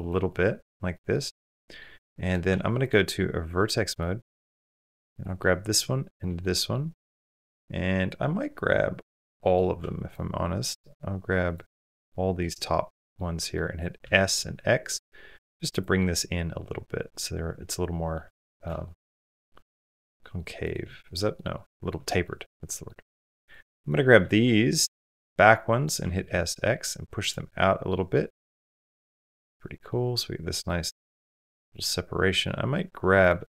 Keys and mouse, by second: 0.1 middle click, 0.7 middle click, 1.4 middle click, 1.9 middle click, 2.3 1, 3.8 middle click, 4.3 shift+middle click, 5.2 middle click, 5.9 shift+click, 6.2 middle click, 7.0-9.3 middle drag, 11.3 shift+click, 12.3 middle click, 13.3 middle click, 13.9 s, 15.8-18.0 middle drag, 18.3 middle click, 18.6 shift+middle click, 19.0 middle click, 19.5 middle click, 20.0 middle click, 21.1 middle click, 21.5 shift+middle click, 22.0 middle click, 22.5 middle click, 24.1-25.6 middle drag, 25.8 s, 27.3 middle click, 27.9 middle click, 28.2 Tab, 28.6-29.7 middle drag, 30.5 middle click, 31.1 Tab, 31.5 middle click, 33.3-33.5 middle drag.